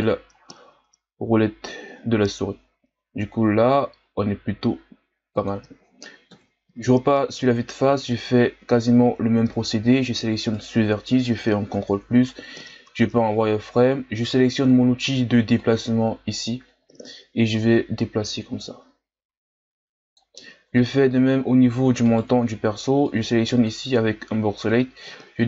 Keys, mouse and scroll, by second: 6.3 KP_1, 7.8 z, 8.4-9.1 ctrl+scroll up 1, 9.1-9.5 scroll up 2, 10.5 right click, 11.6 ctrl+KP_Add, 13.0 z, 15.5-20.6 drag, 20.6-22.0 ctrl+scroll down 2, 22.0 right click, 22.4 b, 25.1-25.4 drag.